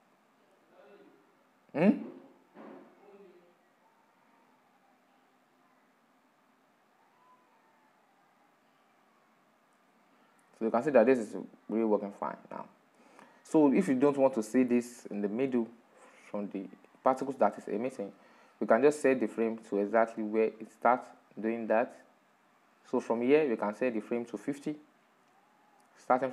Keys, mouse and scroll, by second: 0.1-3.6 drag, 13.2-16.0 drag, 16.0-20.1 middle drag, 20.1-23.2 drag.